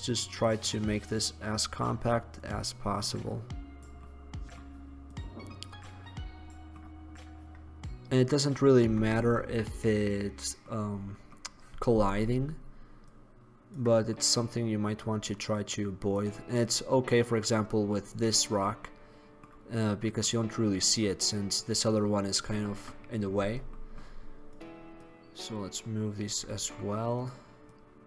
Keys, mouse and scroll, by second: 2.6 right click, 4.2-8.4 middle drag, 8.4 middle click, 12.3-15.9 right drag, 13.2-14.3 drag, 14.1 middle click, 14.5-16.1 drag, 14.5-15.7 middle drag, 16.3 click, 16.4-17.7 middle drag, 25.1-26.4 right drag, 26.9 middle drag, 27.3-27.8 right drag, 27.8-28.0 middle drag.